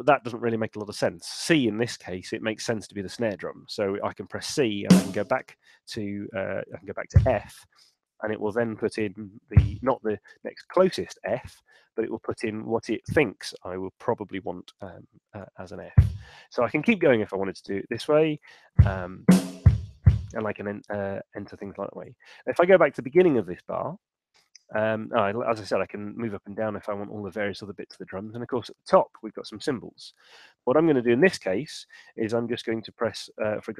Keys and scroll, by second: 4.6 c, 6.4 super+z, 7.0 f, 9.4 f, 15.4-16.4 typing, 18.0-20.0 typing, 22.7 super+Left, 25.7 Up, 28.5 Down, 29.7 Up, 30.1 Down, 33.1 6.